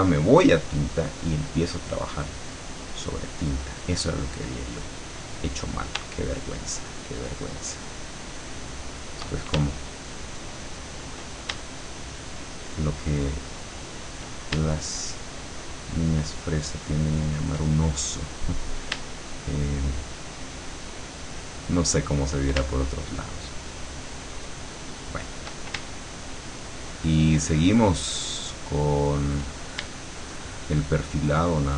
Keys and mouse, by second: 3.0 click, 7.2-9.2 shift+drag, 10.0 shift+click, 12.1-14.2 shift+drag, 15.5-17.5 shift+drag, 19.5-22.5 shift+drag, 23.0-25.6 shift+drag, 26.7-29.5 shift+drag, 30.3-31.7 shift+drag.